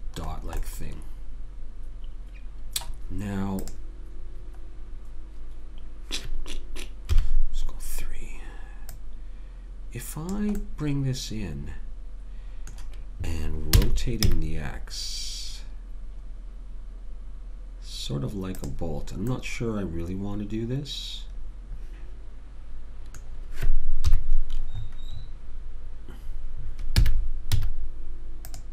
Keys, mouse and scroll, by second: 3.6 click, 7.1 KP_3, 8.9 click, 13.8 r, 19.4-21.4 middle drag, 24.1 KP_3, 27.0 r.